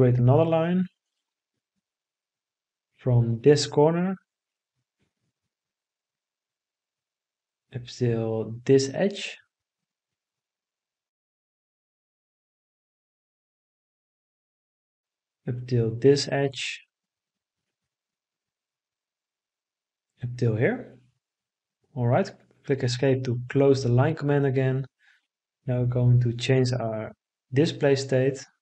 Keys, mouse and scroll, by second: 21.1 Escape.